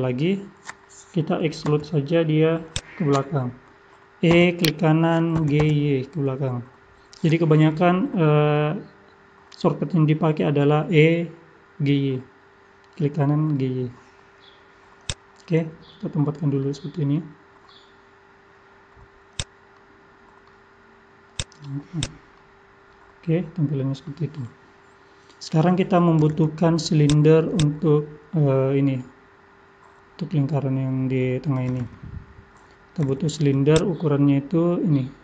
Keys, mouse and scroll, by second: 1.7 KP_3, 2.7 click, 3.4-4.3 scroll up 4, 4.3 e, 5.3 g, 15.4-16.8 scroll down 2, 15.8 middle click, 16.8-18.4 scroll down 2, 17.1 middle click, 19.4 click, 19.7 middle click, 21.3 click, 22.3 middle click.